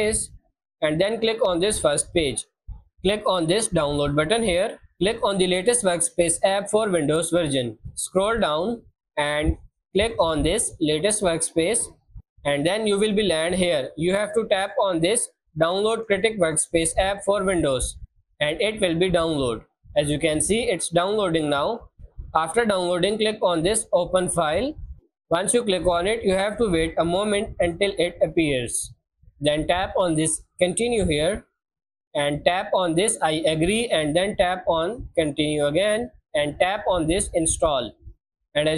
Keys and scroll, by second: 0.0-1.5 typing.